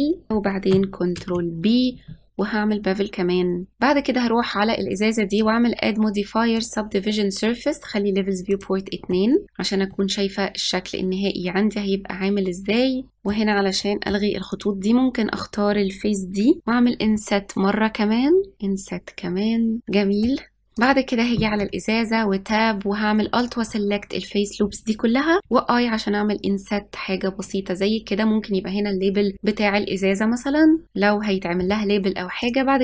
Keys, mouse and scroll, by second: 0.3 middle click, 1.1 ctrl+b, 3.7-4.9 middle drag, 5.2 click, 6.7-8.3 drag, 8.4 click, 9.1 middle click, 9.4-9.9 scroll down 1, 9.9-12.9 middle drag, 13.1-14.5 middle drag, 14.5 click, 17.1 i, 18.5 i, 20.7 click, 21.6 Tab, 23.3 alt+click, 25.4 i, 29.0-29.9 scroll down 2, 29.9-30.8 scroll up 3, 30.8-32.4 scroll up 1, 32.4-32.8 drag.